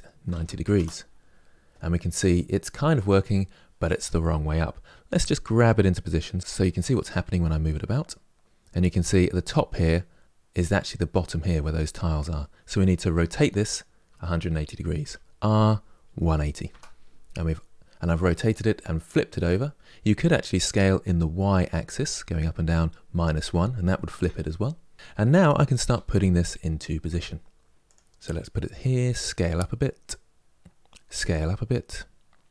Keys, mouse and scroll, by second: 4.9 g, 13.2 r, 25.6 g, 28.4 s.